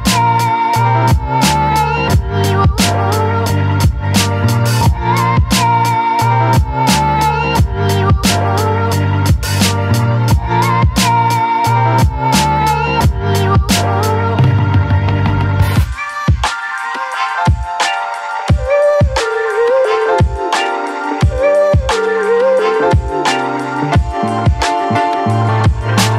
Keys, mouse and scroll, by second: 2.1 space, 2.5 alt+click, 3.7-8.0 ctrl+drag, 8.0-11.7 ctrl+drag, 11.7-15.6 drag, 15.6 ctrl+a, 16.1 ctrl+c, 17.2-20.2 drag, 21.1 ctrl+v, 21.6 space, 21.9-23.5 alt+drag, 23.5 ctrl+t, 24.0-26.1 drag.